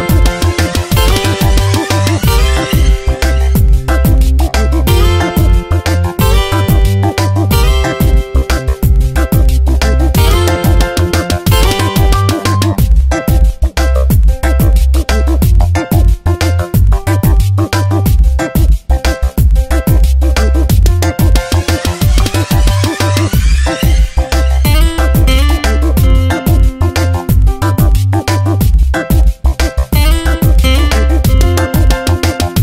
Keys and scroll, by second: 0.1 Return, 0.4 Tab, 11.0 ctrl+t, 12.8 Return, 13.0 v, 13.4 Down, 17.5 shift+Down, 22.5 space, 26.6 ctrl+t, 30.2 shift+Right, 30.9 shift+h, 31.1 Right, 32.3 shift+Right.